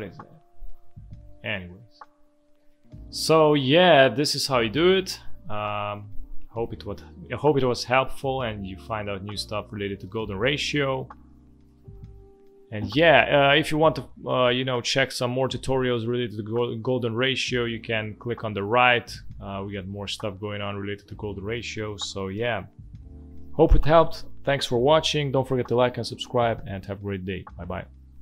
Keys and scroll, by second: 1.3 Delete, 2.6 space, 5.5 space, 6.9 z, 8.6 space, 10.4 v, 10.7 space.